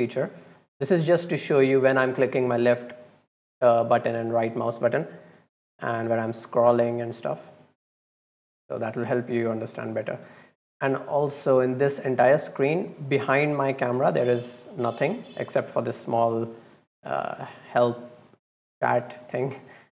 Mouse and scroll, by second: 1.8 click, 2.5 click, 3.9 right click, 5.3 click, 6.0 scroll down 2, 6.1-6.7 scroll up 2, 6.7-7.2 scroll down 2, 8.3 click, 8.8 click, 12.9 click.